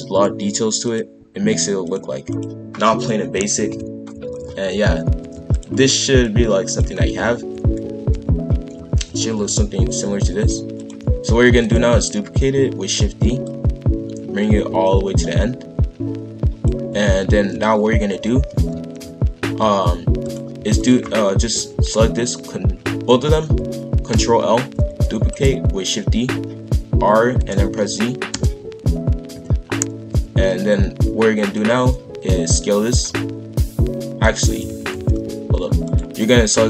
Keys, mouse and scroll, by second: 0.8 click, 1.8 click, 2.3 click, 3.6 ctrl+l, 4.2 shift+f, 6.2 click, 6.9 shift+f, 11.4 shift+d, 13.4 click, 17.0 shift+f, 20.7 shift+click, 24.1 ctrl+l, 24.8 shift+d, 26.7 r, 29.2 KP_5, 29.7-30.1 scroll down 1, 30.1 g, 34.6 ctrl+z, 34.9 ctrl+z, 35.8 click.